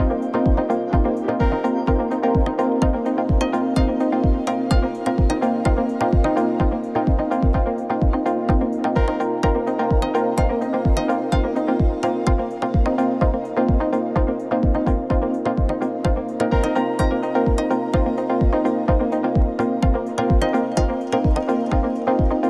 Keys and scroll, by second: 1.3 ctrl+c, 1.6 ctrl+shift+v, 5.8 Left, 6.1 Right, 6.3 Left, 15.5 ctrl+=, 20.8 shift+Right, 21.4 ctrl+z.